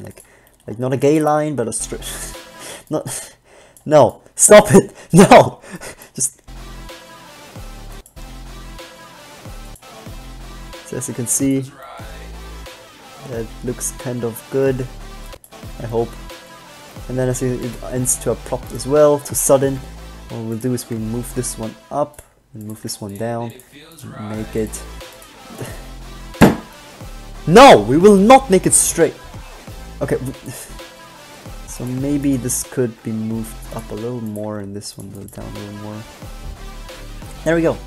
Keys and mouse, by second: 1.9 alt+a, 2.9 alt+a, 6.6 alt+a, 11.8-14.0 drag, 15.0 click, 18.2 g, 20.0 g, 21.0 g, 23.0 click, 23.0 g, 23.8 g, 25.6 g, 30.8-32.0 drag, 31.8 g, 32.4 b, 32.8-34.2 drag, 33.2 g, 34.6 g, 37.2-37.8 middle drag.